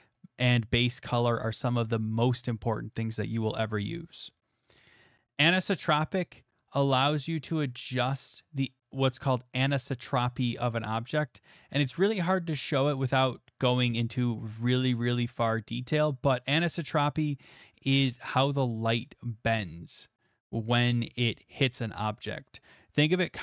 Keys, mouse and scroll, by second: 6.8-12.1 drag, 12.1 middle click, 17.1 click, 18.6-22.1 drag.